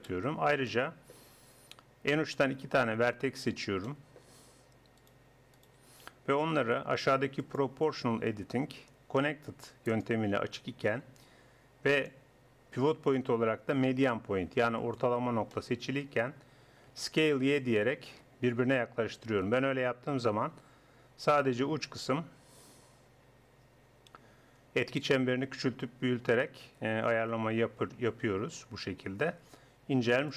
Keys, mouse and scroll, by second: 2.7 middle click, 3.5 click, 4.0-5.0 drag, 5.0-7.1 middle drag, 7.1-9.2 drag, 11.9 click, 13.4 click, 15.6-16.9 drag, 16.9 s.